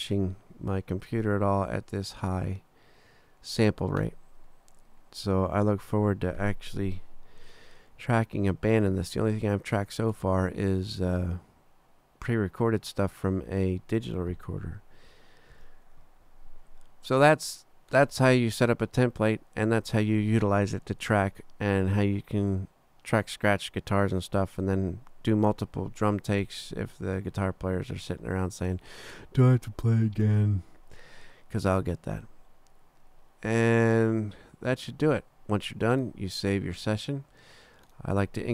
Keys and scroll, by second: 15.5 super+=.